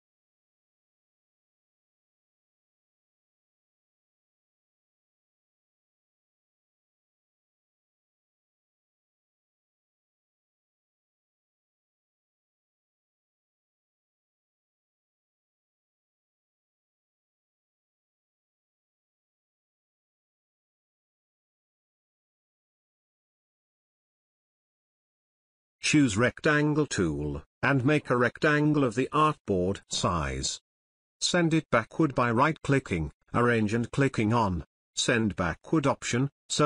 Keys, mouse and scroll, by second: 1.2 Left, 1.7 click, 3.1 ctrl+alt+space, 4.5-5.4 drag, 7.0 shift+click, 8.3 click, 9.5 ctrl+space, 9.7 ctrl+alt+click, 11.6-12.3 click, 12.9-13.8 drag, 15.4 right click, 16.8 click, 18.9 space, 19.1 ctrl+alt+click, 19.4-20.0 drag, 24.8-26.1 drag, 27.6-29.3 drag, 29.9-30.8 scroll up 1, 30.8 click, 31.2-31.9 scroll up 1, 31.9 right click, 34.6 click.